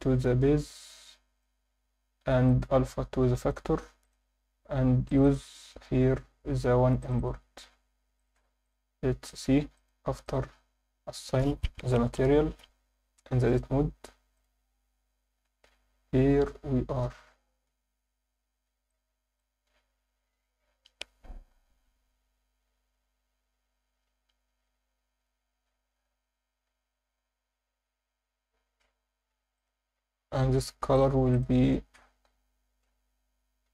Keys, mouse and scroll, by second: 2.5-3.5 drag, 4.0-4.5 drag, 8.2-8.7 drag, 9.3 click, 9.7-10.9 drag, 13.5 Tab, 14.4 click, 15.2 Tab, 15.3 scroll up 3, 16.7 scroll up 2, 18.4 scroll down 2, 18.9-19.4 alt+middle drag, 29.5 click, 30.9 click, 31.4-33.7 drag.